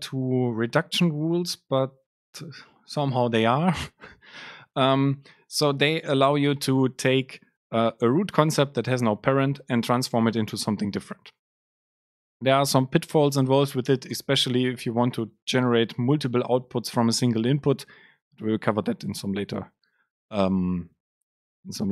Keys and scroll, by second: 13.2 Up, 13.4 shift+Down, 14.1 Delete.